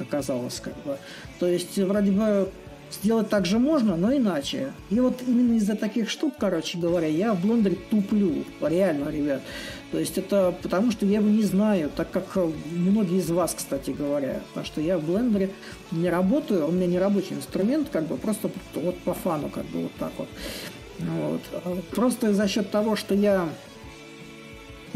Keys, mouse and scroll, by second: 8.8 click, 9.2 click, 14.6-15.7 middle drag, 15.9 ctrl+click, 18.3-20.3 drag, 20.3 middle click, 20.4-23.3 drag.